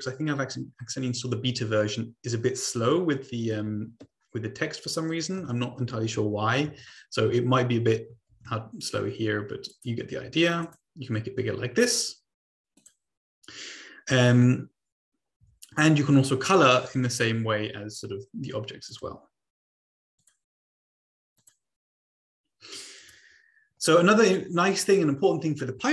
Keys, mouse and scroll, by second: 3.3 click, 4.1 BackSpace, 4.5 Right, 5.3 space, 5.9 Right, 6.6 Right, 7.5 Delete, 8.3 ctrl+a, 9.7-11.6 drag, 12.7 click, 18.9 click, 20.1 click, 21.3 click, 22.9 click, 24.8 click.